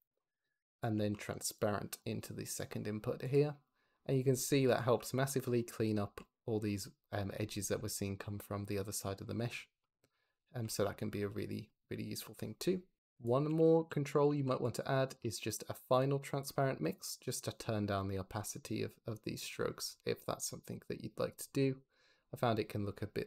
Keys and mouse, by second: 0.7 click, 0.9 shift+d, 2.1 drag, 3.1 click, 4.6 click, 4.8 m, 5.9 m, 7.3 m, 7.7 m, 9.7 click, 13.3 g, 13.6 x, 13.8 click, 14.0 click, 14.2 shift+d, 14.9 click, 15.2 shift+d, 15.4 click, 15.6 drag, 15.7-17.2 middle drag, 17.2-21.6 drag, 21.8-23.2 drag.